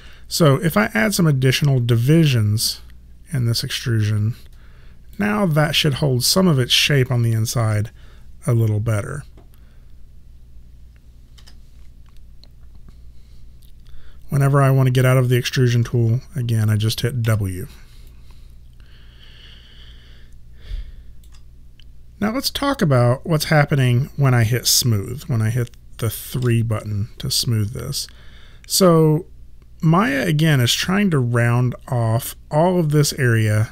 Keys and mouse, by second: 0.0 1, 2.0 click, 7.6 3, 11.4 1, 17.3 w, 18.1 alt+click, 26.5 3.